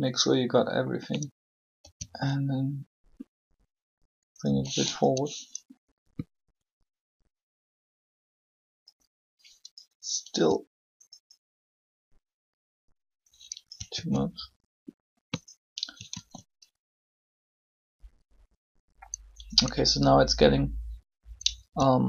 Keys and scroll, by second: 1.8 g, 10.1 g, 13.9 alt+a, 16.1 alt+a.